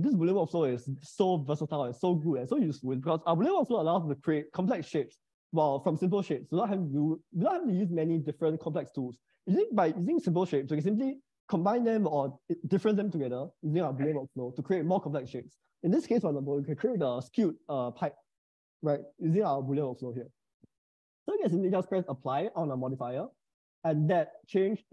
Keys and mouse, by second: 21.7-23.5 drag, 23.8-24.9 middle drag.